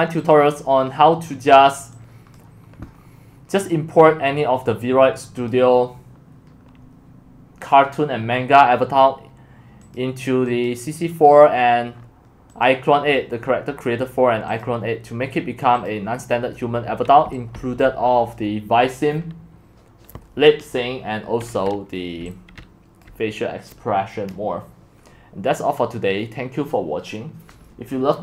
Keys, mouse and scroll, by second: 2.9-4.0 scroll down 4, 4.0 scroll down 1, 4.3-5.5 middle drag, 4.3-5.4 scroll, 5.5-11.5 drag, 11.5-14.6 scroll down 17, 12.6 click, 14.6 scroll down 1, 14.6-16.5 drag, 16.6 scroll down 2, 16.7 middle click, 17.2 x, 17.6 c, 17.8-21.6 drag, 21.6 middle click, 21.6-22.2 scroll down 2, 22.2 scroll down 1, 23.0-25.1 drag, 25.1-28.2 middle drag.